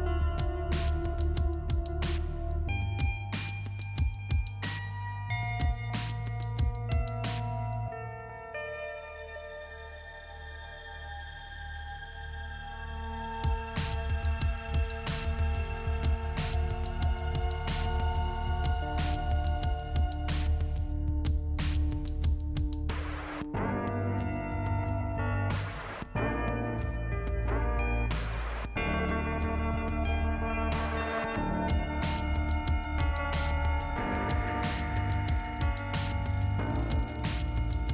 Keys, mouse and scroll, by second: 0.4 click, 0.7 click, 0.9-2.0 scroll down 2, 2.2 click, 2.2 click, 5.0 shift+Return, 5.4 middle click, 7.5 click, 8.9 click, 10.2 click, 11.3 click, 11.4 click, 12.4 click, 14.2 click, 14.3 click, 14.7 click, 14.7 double click, 15.2 double click, 17.7 click, 20.0 click, 22.5 click, 24.5 scroll up 2, 27.4 click, 27.9 click, 28.0 click, 28.4 double click, 28.5 double click, 29.7 scroll down 2, 31.7 click, 31.8 click, 33.3 click, 35.1 click, 35.6 click, 35.6 scroll down 2.